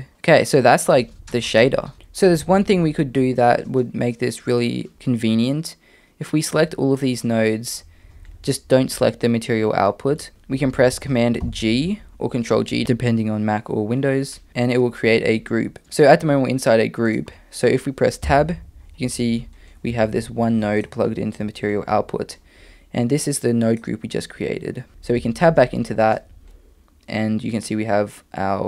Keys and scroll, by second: 11.4 super+g, 18.2 Tab, 19.9 g, 24.9 Tab, 25.1 Tab.